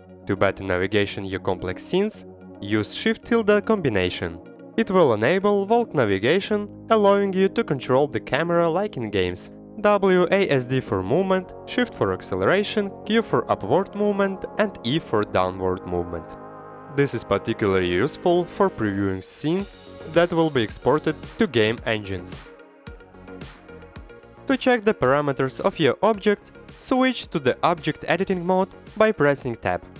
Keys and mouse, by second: 0.8 click, 1.0 middle click, 2.5 shift+`, 24.2 ctrl+z, 26.5 click, 28.5 Tab, 29.3 click, 29.5 middle click.